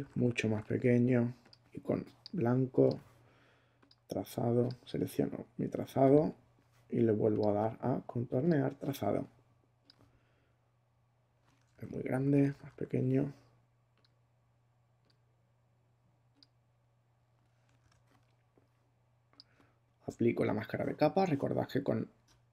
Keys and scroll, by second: 11.7 super+z, 12.1 super+<, 17.8 super+d.